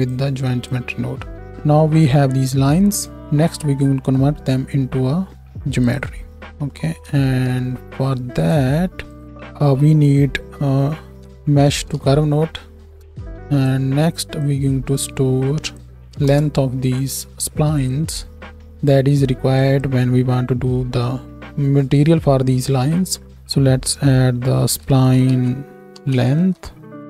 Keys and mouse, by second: 7.2 shift+a, 9.2 click, 13.0-14.8 drag, 13.6-14.8 middle drag, 13.6-14.8 right drag, 17.8-19.6 right drag.